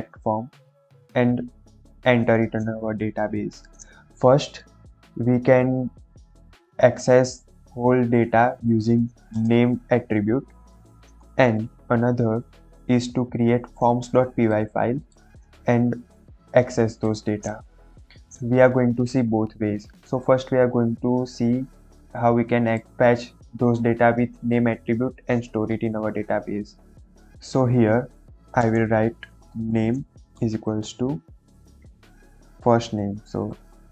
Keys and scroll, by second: 9.3 space, 9.5 n, 10.1 BackSpace, 11.1 BackSpace, 11.5 ctrl+s, 28.1 Left, 28.5-30.7 typing, 33.5-33.9 typing.